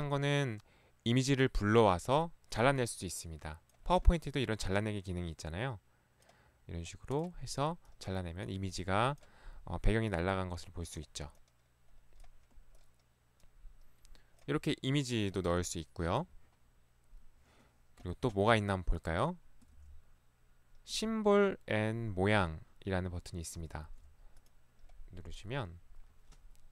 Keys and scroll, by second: 19.8 ctrl+1, 23.8 Escape, 24.0 ctrl+1.